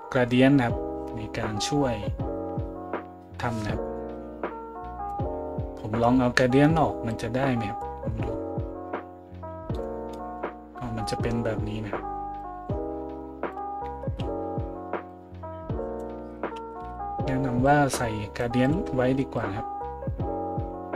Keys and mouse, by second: 14.1 ctrl+z, 16.8 ctrl+z, 18.7-19.3 middle drag, 19.3-20.9 drag.